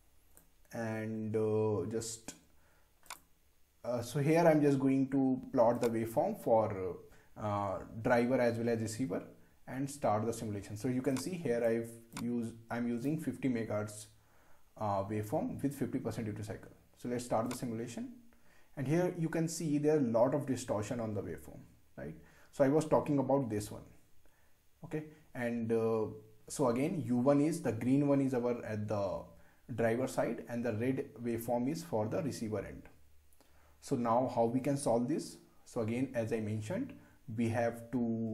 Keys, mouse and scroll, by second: 3.1 click, 5.8 click, 11.5 click, 17.5 click.